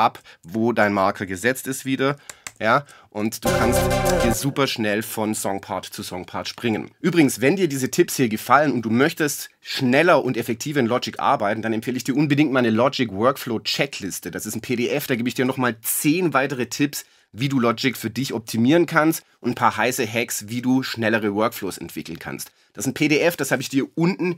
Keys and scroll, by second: 2.5 shift+super+Left.